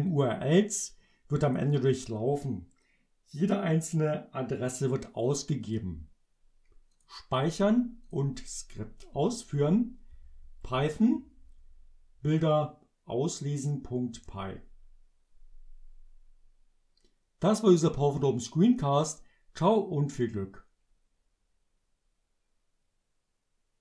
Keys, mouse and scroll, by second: 0.2-1.8 drag, 5.7 click, 7.0 click, 8.1 click, 14.2 Return.